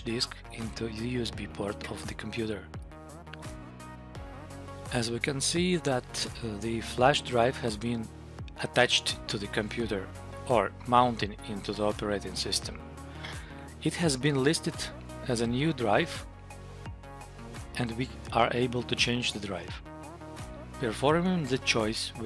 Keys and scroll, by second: 14.4 Down.